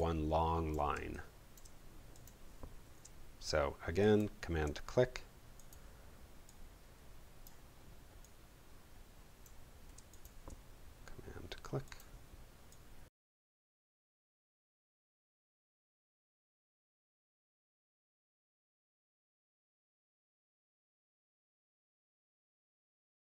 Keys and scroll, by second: 0.9 space, 14.0 super+space, 20.6 super+z.